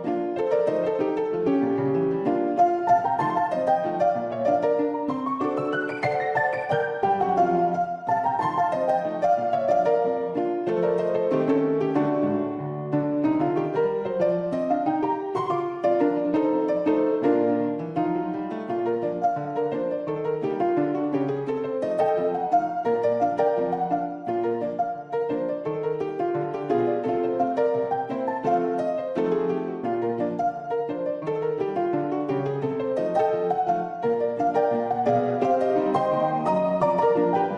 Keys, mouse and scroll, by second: 0.9 click, 2.7 middle click, 4.8 shift+click, 5.1 click, 5.5 3, 6.2-6.7 shift+drag, 6.9 `, 8.3 e, 10.6 click, 12.3 shift+click, 12.6 click, 12.7 middle click, 13.3 shift+middle click, 13.7-15.9 middle drag, 16.9 2, 17.1 click, 17.5 click, 19.1 shift+click, 19.4 click, 19.6 middle click, 20.0 shift+click, 20.5 shift+click, 21.9 x, 23.0 click, 24.5 click, 25.9 ctrl+b, 27.6 middle click, 28.0 click, 29.2 shift+middle click, 29.6-32.3 drag, 33.0 shift+click, 34.1-35.6 drag, 36.7 shift+click, 36.9 Tab, 37.4 `.